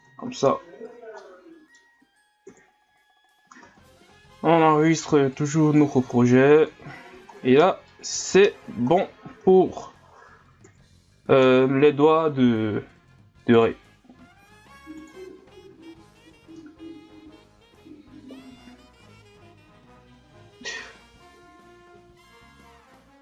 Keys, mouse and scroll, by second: 0.2 a, 0.4 scroll down 1, 1.2-2.5 middle drag, 2.5 KP_Divide, 3.6 ctrl+s, 6.9-7.4 scroll down 6, 7.9 middle click, 8.5 scroll down 1, 8.8 scroll up 7, 9.6 scroll up 1, 10.6 KP_Divide, 11.4 KP_1, 13.5 click, 15.0 click, 15.9-16.7 scroll down 1, 16.7 scroll up 2, 18.5-19.8 scroll up 1.